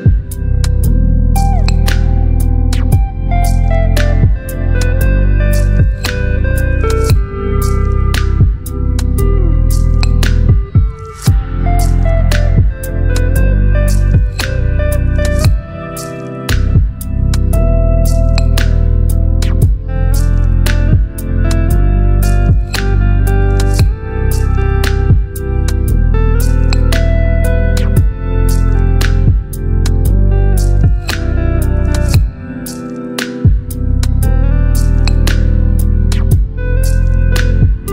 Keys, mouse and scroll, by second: 0.1 click, 1.1 shift+click, 2.9 ctrl+g, 6.2-8.7 drag, 15.4-18.1 shift+drag, 23.4 click, 27.3 click, 27.4-34.1 drag, 35.1 Delete, 36.5 ctrl+d.